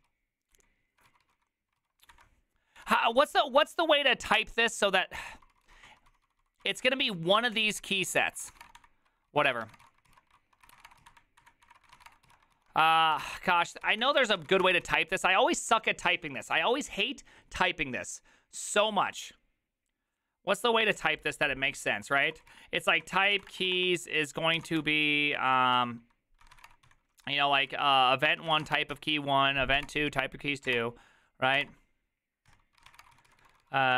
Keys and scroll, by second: 28.3-29.4 typing, 29.8 Tab, 29.9 Return, 30.7 Tab, 30.8 Return, 31.6 Tab, 32.5 Return, 32.5 Tab, 32.7-33.9 typing.